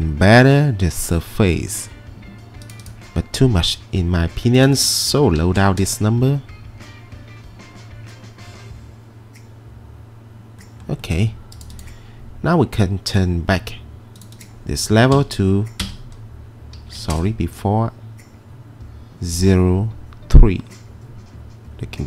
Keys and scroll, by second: 5.2-6.1 typing, 14.9-17.3 typing, 15.8 Return.